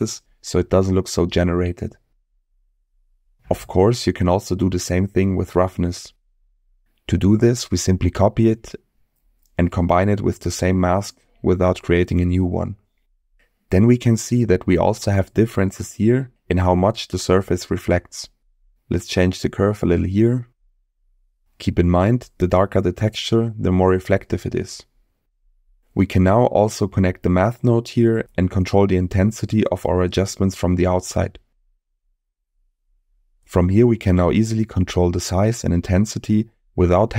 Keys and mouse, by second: 0.2 m, 0.7 m, 1.5-2.3 middle drag, 4.4 middle click, 5.5 click, 6.1-6.8 drag, 7.5 click, 8.0 click, 8.8 shift+d, 9.7 click, 11.1 middle click, 12.0-13.1 drag, 14.6-15.2 middle drag, 17.0 click, 17.9 click, 18.9 click, 19.9 click, 21.1-21.7 middle drag, 22.2 middle click, 26.2 middle click, 27.3-28.9 drag, 29.7 click, 31.3-37.1 drag.